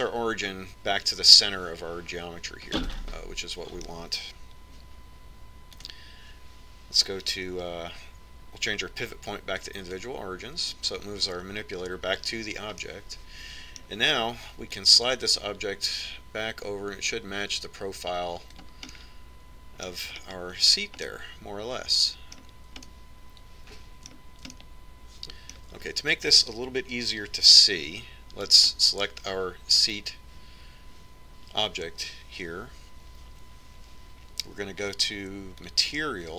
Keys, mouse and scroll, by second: 3.9-5.8 middle drag, 7.0-8.7 drag, 8.7 click, 14.1-15.9 middle drag, 16.3-17.9 drag, 20.2-24.1 middle drag, 22.2 scroll up 1, 27.7-29.8 middle drag, 29.8-31.5 right drag, 31.5 middle click.